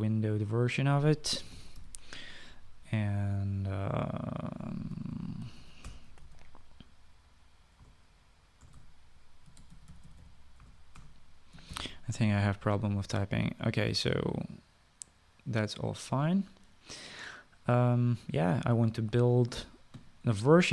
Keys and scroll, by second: 2.0-3.2 typing, 5.6-7.5 typing, 8.7-13.3 typing.